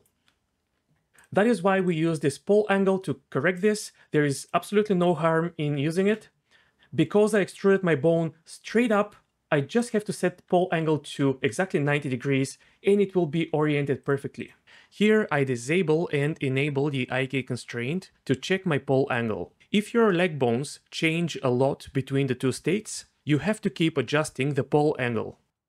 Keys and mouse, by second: 0.0 d, 0.0 d, 0.1 d, 0.2 d, 1.9-3.6 drag, 4.4-6.1 drag, 6.7 ctrl+z, 6.7 d, 10.0-11.5 drag.